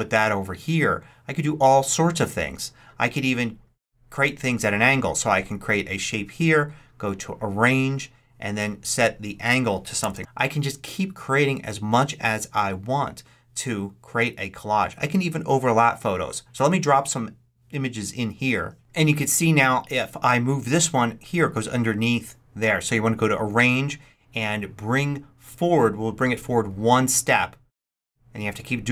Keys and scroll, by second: 9.8 5, 10.0 Return.